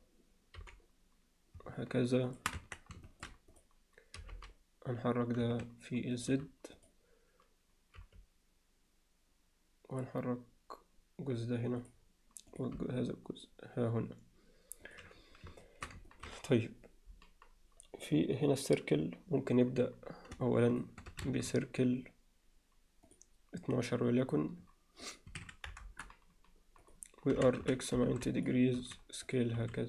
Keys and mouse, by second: 0.6 g, 2.6 Tab, 3.1 alt+shift+middle click, 3.6 click, 4.2 g, 8.0 g, 12.6 click, 12.8 g, 15.6 alt+shift+middle click, 16.1 ctrl+middle click, 21.3 shift+a, 24.3 click, 25.0-26.8 drag, 26.9 click, 27.4 r, 28.8 s, 29.6 s.